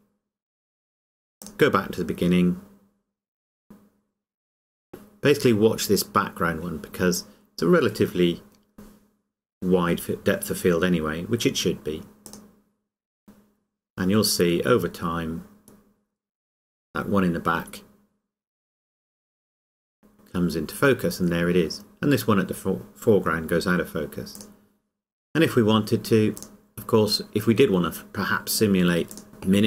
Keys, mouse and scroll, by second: 1.4 click, 12.3 click, 24.4 click, 27.2-27.5 scroll down 1, 29.1 click.